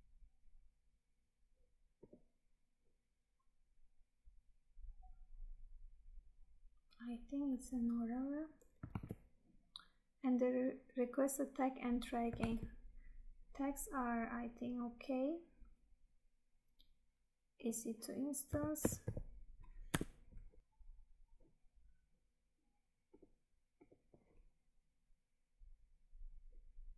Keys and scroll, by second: 9.0 Tab, 12.5 Tab.